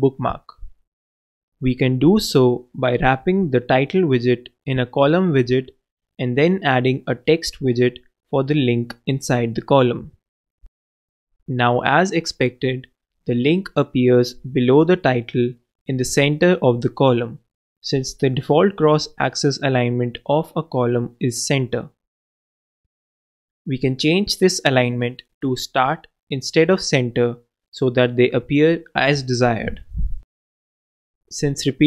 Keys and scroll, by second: 3.1 alt+Return, 3.7 alt+Down, 6.0 super+Down, 6.3 super+Down, 6.5 super+d, 9.1 alt+super+z, 10.0 alt+Return, 10.3 alt+Down, 11.2 super+Down, 11.2 super+d, 12.8 super+k, 13.2 super+s, 25.7 shift+Return, 25.8 shift+c, 26.1 shift+a, 27.0 shift+Return, 27.6 super+Return, 27.8 super+Left, 28.3 shift+super+c, 29.2 super+c, 30.2 super+Return, 30.3 super+v, 31.7 super+s.